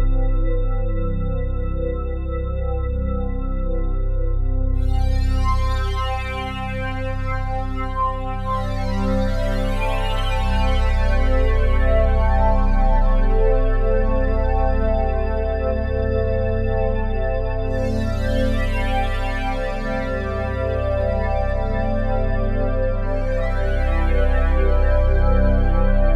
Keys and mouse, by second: 0.5 click, 1.6-3.7 drag, 3.7 BackSpace, 5.3-7.2 typing, 9.2 click, 9.2 typing, 9.4 click, 10.4 click, 11.3 ctrl+alt+click, 12.0 click, 12.7-14.0 typing, 13.3 click, 14.6 click, 15.1 Delete, 15.4 click, 15.7 Delete, 17.0 alt+shift+click, 17.5-18.9 alt+drag, 19.3 click, 19.6 click, 20.4 shift+click, 21.5 ctrl+j, 22.6-23.9 alt+drag, 24.2 ctrl+s, 24.9 click, 25.7 Delete.